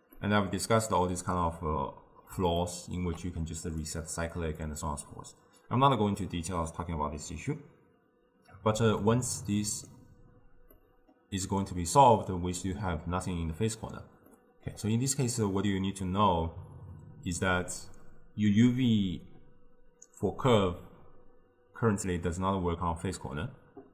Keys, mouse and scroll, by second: 3.7 click, 4.7 click, 9.1-13.9 middle drag, 14.4-17.4 middle drag.